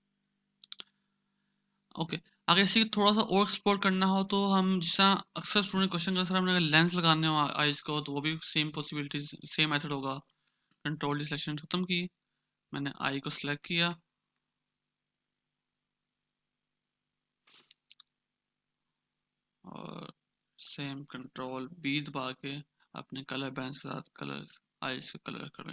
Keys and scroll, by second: 7.1 ctrl+=, 7.4 ctrl+=, 7.5 ctrl+=, 8.9-9.7 ctrl+=, 10.6 ctrl+=, 10.6 ctrl+d, 12.8-14.5 typing, 22.2 ctrl+b.